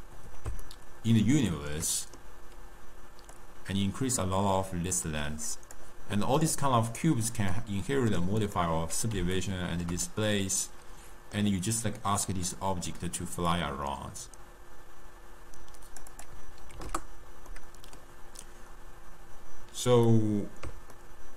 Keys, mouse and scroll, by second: 0.6-3.3 ctrl+middle drag, 3.3-6.3 drag, 7.5-8.3 middle drag, 8.3 click, 9.3-13.4 ctrl+middle drag, 13.4-17.5 drag, 17.5-21.3 middle drag.